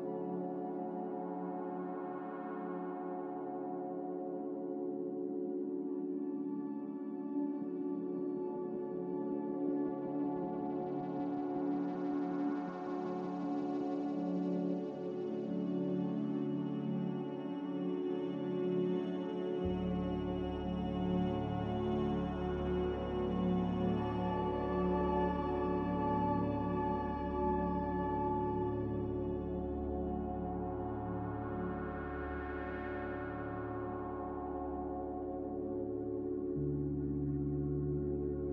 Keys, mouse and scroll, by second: 0.8 b, 3.5 z, 5.3 b, 11.3 Escape, 14.4 a, 24.3 z, 26.1 5, 26.3 Return, 32.0 b, 34.4 Delete, 35.6 m, 37.7 5, 38.0 Return.